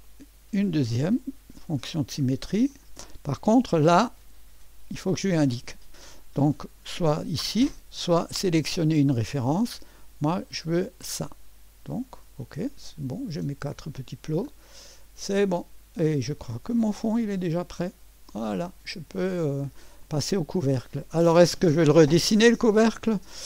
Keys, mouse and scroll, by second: 0.0 click, 2.7 click, 6.6 click, 8.8 click, 10.8 click, 13.4 click, 15.3-16.5 drag, 16.9-17.4 scroll up 1, 17.4-19.2 drag, 19.5 middle click, 20.0 click.